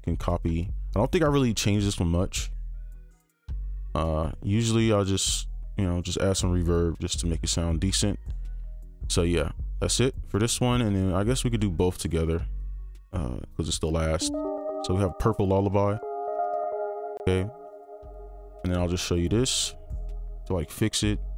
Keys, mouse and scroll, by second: 9.8 typing, 13.3-13.8 scroll down 1, 18.2 typing.